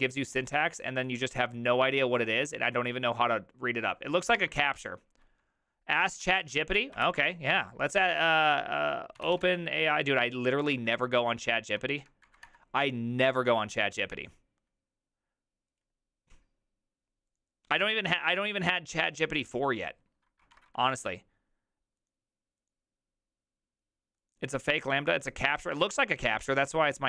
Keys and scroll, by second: 4.4 alt++, 7.0 ctrl+t, 8.9-9.9 typing, 10.7 Down, 10.9 Down, 11.1 Down, 11.2 Down, 12.0 Up, 12.2 Down, 12.4 Return.